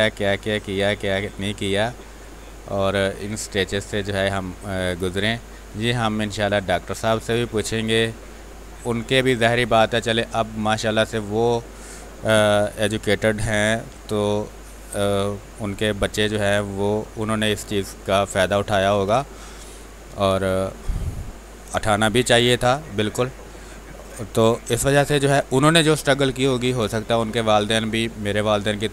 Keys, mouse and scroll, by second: 0.0-1.8 drag, 1.8 space, 2.1 click, 2.4 space, 3.1-6.2 drag, 6.2 click, 7.4 click, 8.6 space, 8.9 alt+click, 10.5 click, 13.5 ctrl+d, 14.5 click, 17.4 shift+space, 17.8 ctrl+click, 19.0 shift+space, 19.2 click, 20.4 shift+click, 21.5 click, 22.8 r, 23.0 click, 24.2 b, 24.6 space, 24.8 ctrl+click, 25.6 click.